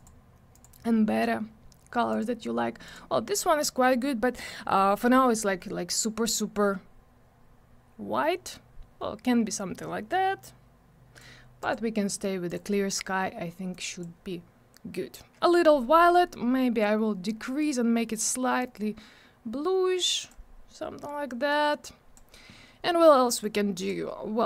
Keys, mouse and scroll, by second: 0.0 double click, 0.5 click, 2.1 click, 5.9 click, 11.6 click, 12.5 click, 13.7 click, 17.6 click, 21.5 click, 23.4 click.